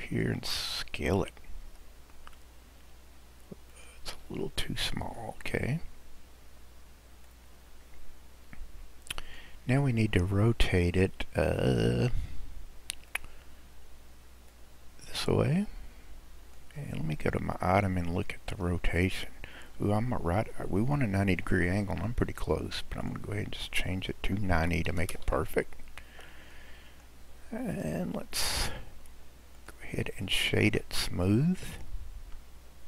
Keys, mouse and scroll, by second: 0.3-1.6 middle drag, 1.6 s, 5.0 click, 5.9-7.3 scroll, 7.3 click, 9.9-12.9 middle drag, 13.1-14.9 drag, 17.8 click, 23.1-26.1 drag, 26.1-26.6 scroll down 1, 26.6-27.4 middle drag, 27.4-28.0 scroll up 6, 28.0-29.6 middle drag, 29.6 click, 30.2 right click.